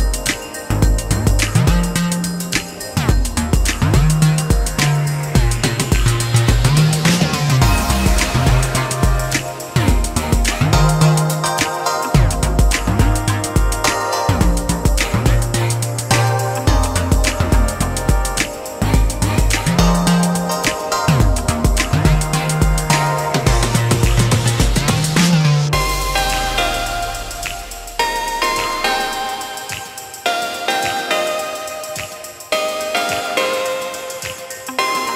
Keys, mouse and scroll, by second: 4.8 space, 13.5 Return, 27.0 ctrl+z, 34.0 shift+middle click, 34.9 shift+middle click.